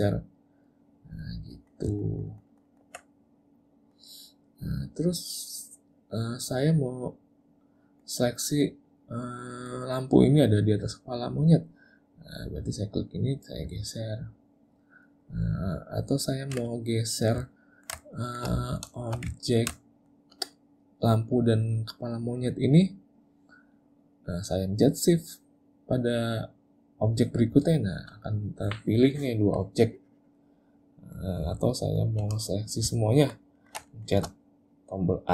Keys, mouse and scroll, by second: 0.7 click, 1.4 middle click, 1.9 ctrl+middle click, 2.1 ctrl+middle click, 2.3 ctrl+middle click, 2.5 ctrl+middle click, 2.7 ctrl+middle click, 3.0 middle click, 3.8 middle click, 4.2 middle click, 8.9 middle click, 13.0 click, 13.7 click, 16.9 middle click, 17.6 ctrl+middle click, 18.1 shift+middle click, 18.6 middle click, 19.0 shift+middle click, 19.5 ctrl+middle click, 19.9 shift+middle click, 27.5 shift+click, 29.6 click, 31.0 middle click, 31.7 shift+middle click, 31.9 shift+middle click, 33.1 ctrl+middle click, 33.6 ctrl+middle click, 33.9 shift+middle click.